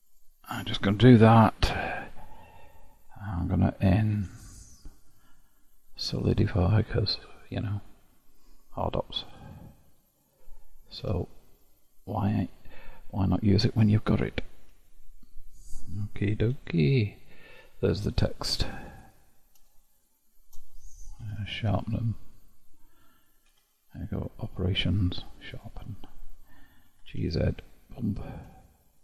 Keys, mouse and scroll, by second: 0.2-3.2 drag, 4.2 q, 10.2 click, 11.1 q, 16.6 KP_Divide, 17.8-19.1 middle drag, 19.1 click, 20.0 shift+click, 21.3 q, 23.6 q.